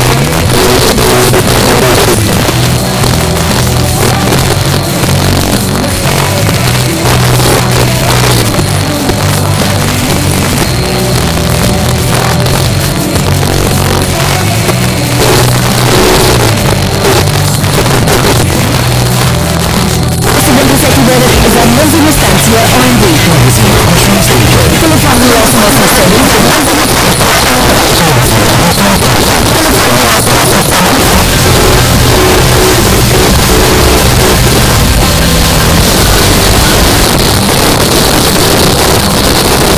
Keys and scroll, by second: 26.4 Page_Down, 36.9 Page_Down.